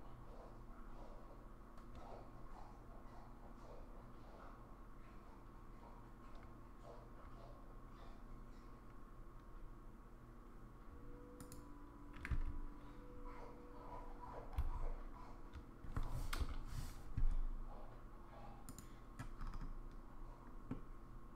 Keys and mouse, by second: 20.8-21.3 middle drag.